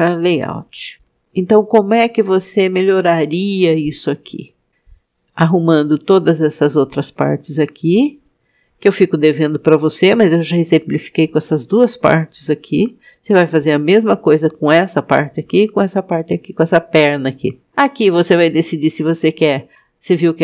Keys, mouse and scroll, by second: 2.0-2.8 scroll up 3, 3.6 scroll up 1.